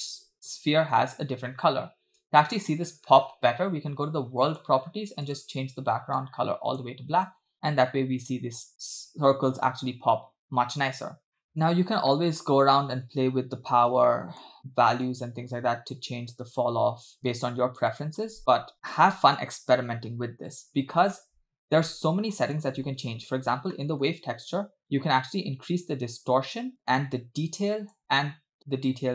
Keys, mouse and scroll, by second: 0.3 space, 1.0 space, 2.3 space, 3.2 space, 4.5 click, 5.2 click, 7.5 space, 11.2 space, 11.4 middle click, 12.1 scroll up 2, 12.1 middle click, 12.7-13.3 scroll up 4, 14.1 middle click, 15.1-18.6 shift+drag, 18.7-19.2 scroll down 4, 21.2 middle click, 22.5 click, 23.8 middle click, 25.4-26.7 shift+drag, 27.0-28.0 shift+drag, 28.4-29.1 shift+drag.